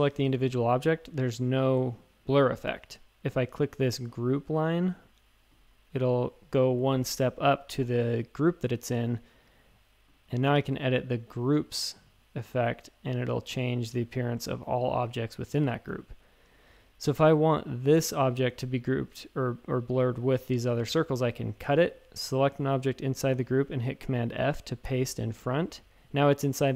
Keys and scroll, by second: 15.5 shift+super+a, 15.8-17.3 typing, 21.6 super+x, 21.9 a, 24.8 super+f.